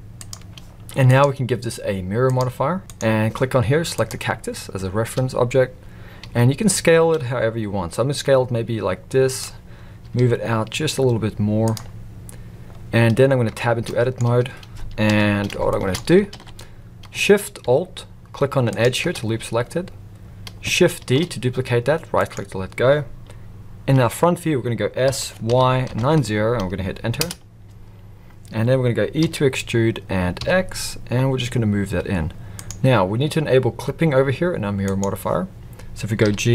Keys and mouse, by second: 1.1-3.1 drag, 6.2 s, 10.0 g, 13.5 Tab, 13.8 middle drag, 15.0 KP_1, 15.7 shift+middle drag, 16.3 alt+a, 18.8 alt+shift+drag, 21.0 shift+d, 25.0 r, 29.2 e, 34.9 click, 36.2 g.